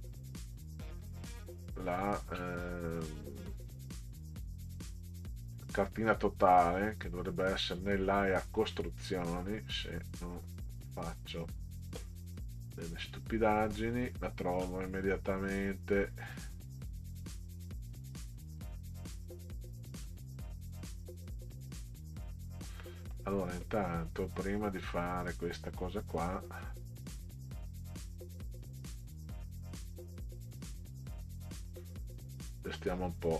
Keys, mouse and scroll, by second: 0.3 scroll up 2, 0.6 scroll down 1, 1.0-1.4 scroll down 1, 1.5-2.5 scroll up 6, 2.9 click, 4.9 click, 8.4-9.8 scroll down 8, 11.1 click, 12.9 click, 14.6 scroll up 2, 16.3 click, 18.5 click, 20.0 scroll up 2, 21.8 click, 22.8 middle click, 26.4 click, 31.6 click.